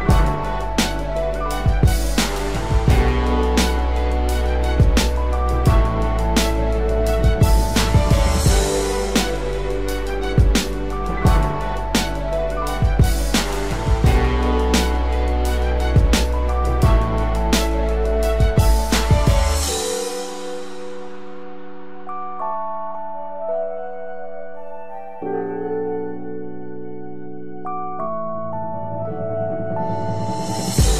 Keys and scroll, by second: 3.3 ctrl+z, 7.0 ctrl+z, 12.8 ctrl+-, 13.4 ctrl+-, 14.7 ctrl+=, 15.5 ctrl+=.